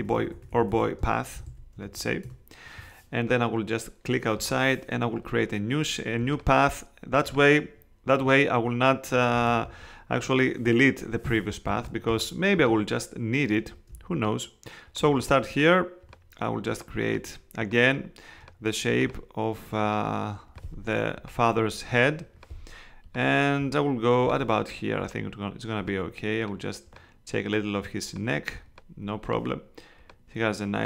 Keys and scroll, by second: 0.0-2.4 typing, 9.5 super+z, 11.2 space.